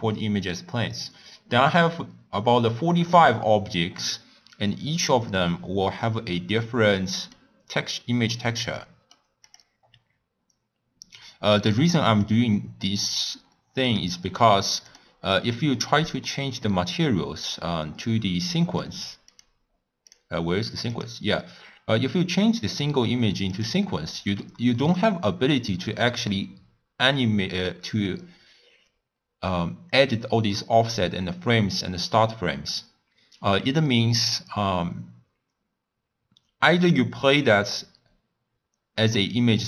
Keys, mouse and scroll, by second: 4.0 click, 6.0 click, 6.8-7.6 middle drag, 7.6-8.3 scroll up 3, 8.3-9.5 middle drag, 9.5 click, 12.2 click, 13.8 click, 15.3 click, 23.6-39.6 drag.